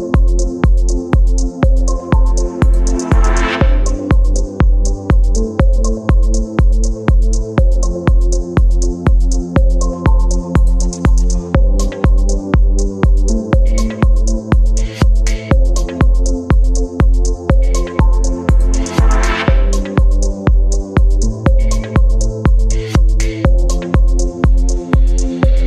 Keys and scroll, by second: 4.7 space, 11.2 ctrl+j, 12.1 ctrl+e, 18.2 space, 19.1 v, 20.0 ctrl+t.